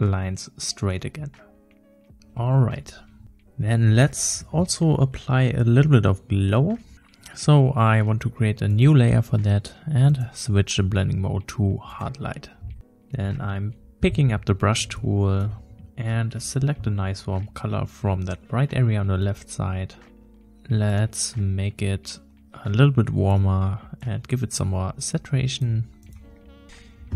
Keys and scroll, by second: 2.1 ctrl+shift+e, 14.2 b, 26.6 ctrl+z.